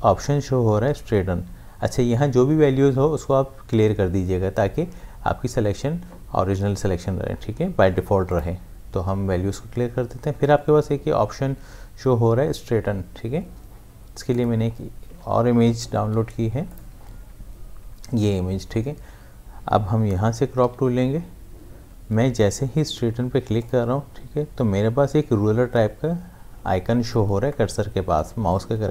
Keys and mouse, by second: 8.3 click, 14.3 click, 15.7 ctrl+z, 16.0 v, 16.7 click, 20.6 c, 23.6 click.